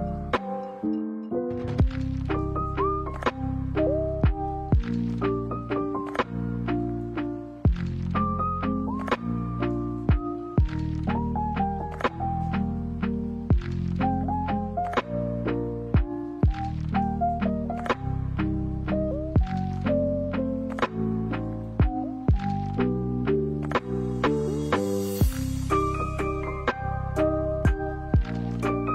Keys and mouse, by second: 0.8-3.1 middle drag, 3.4-5.1 middle drag, 5.4 middle click, 6.7 middle click, 8.5 KP_1, 9.8 middle click, 10.9 g, 14.1-16.7 middle drag, 17.4 middle click, 17.6 KP_1, 18.1 middle click, 19.1 shift+middle click, 19.4 middle click, 21.3 middle click, 21.7 s, 24.4 alt+s, 26.4 g, 27.8 alt+s.